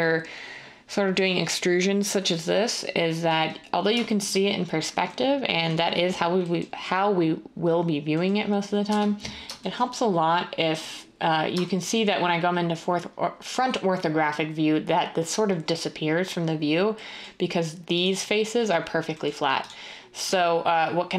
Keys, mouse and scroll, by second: 8.8 1, 20.2 1.